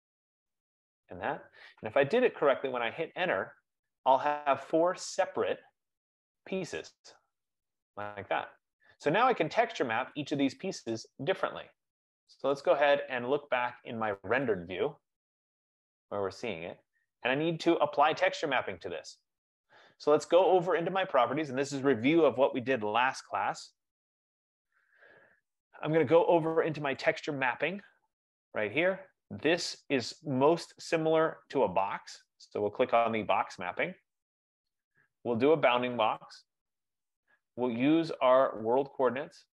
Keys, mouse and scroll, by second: 0.6 click, 2.7 Return, 3.7 F15, 4.2 click, 5.6 click, 6.6 click, 7.7 click, 8.7-9.0 scroll, 9.6-10.0 scroll, 10.3 click, 12.8 click, 14.8 click, 16.4-17.6 scroll, 17.6-18.0 scroll, 21.3 click, 23.5 click, 27.4-32.5 drag, 33.6-36.0 drag, 36.7 click, 38.9 click.